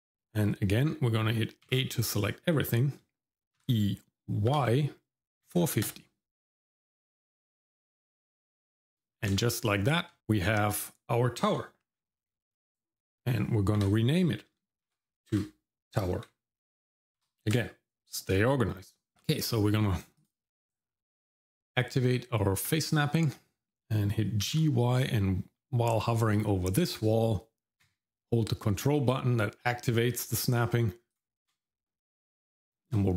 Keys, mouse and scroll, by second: 1.7 a, 3.6 e, 7.6 shift+middle click, 8.2 Tab, 8.9 shift+middle click, 9.4 shift+z, 10.1 shift+middle click, 13.8 F2, 19.1 shift+middle click, 20.2-22.9 drag, 24.4 g, 33.0 shift+middle click.